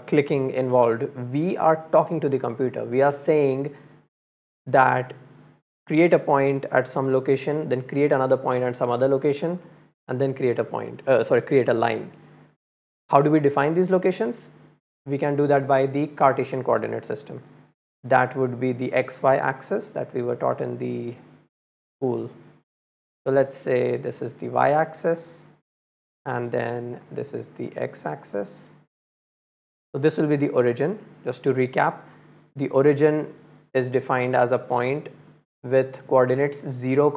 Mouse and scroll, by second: 16.1-17.3 drag, 17.8-18.2 middle drag, 18.2 click, 18.5 middle drag, 20.3 middle click, 24.5 click, 26.2 click, 28.0 click, 31.3 middle click, 32.0 scroll up 1.